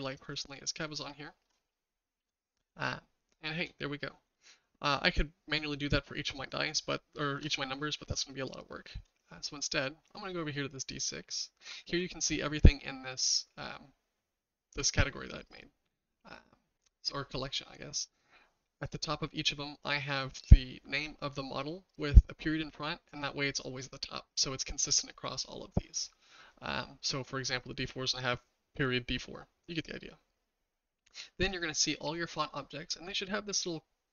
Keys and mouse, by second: 0.9-1.4 shift+middle drag, 2.8-3.6 shift+middle drag, 4.4-7.4 shift+middle drag, 10.9 click, 19.3 click, 31.5 click.